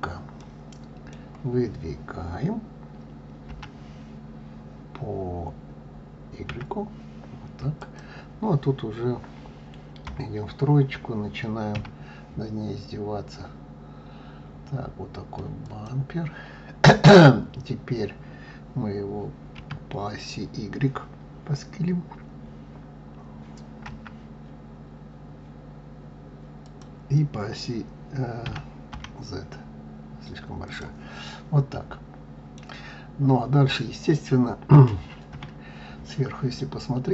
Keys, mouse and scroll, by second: 0.3-3.3 middle drag, 3.4 g, 10.0 KP_3, 11.7 s, 19.5 s, 28.4 s, 31.2-34.2 middle drag, 35.2 KP_7, 36.4-36.9 scroll down 2.